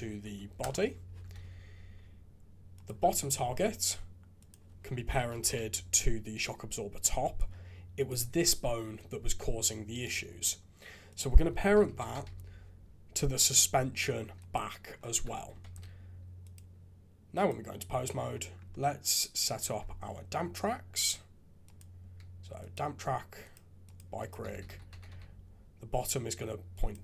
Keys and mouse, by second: 1.4 alt+a, 2.8-7.4 drag, 7.9 click, 8.2 g, 11.1-14.5 drag, 15.1 alt+a, 15.6 ctrl+Tab, 20.9 click, 21.8-22.7 drag, 23.6 click, 24.3-26.9 drag.